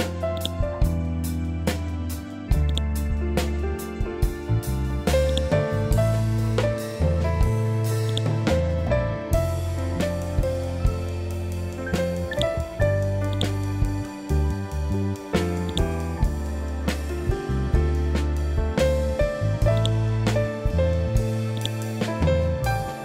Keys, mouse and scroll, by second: 0.3 click, 2.6 click, 6.4 scroll down 1, 8.0-10.0 drag, 10.0 ctrl+k, 12.2-19.7 drag, 19.7 right click, 21.5 click.